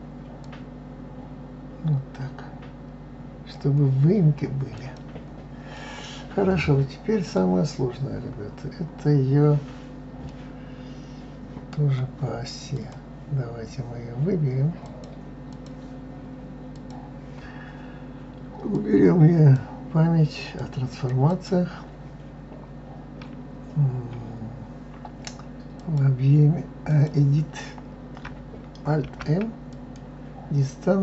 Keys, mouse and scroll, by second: 0.4-3.4 drag, 4.7 click, 5.7-7.6 middle drag, 7.6-9.1 scroll down 9, 9.4-10.3 scroll down 1, 10.3-12.7 middle drag, 12.7 click, 14.8-16.9 drag, 18.7-21.5 drag, 25.7-28.7 drag, 29.0 alt+m.